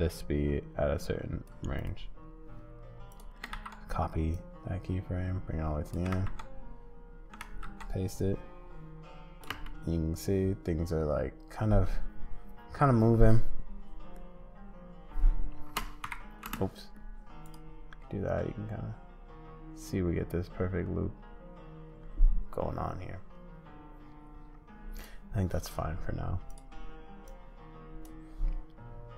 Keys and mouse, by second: 3.1 click, 3.5 ctrl+c, 4.4-5.9 drag, 6.1 ctrl+v, 7.4 ctrl+v, 9.5 space, 15.7 space, 16.0 n, 16.4 space, 17.4 click, 24.9 click.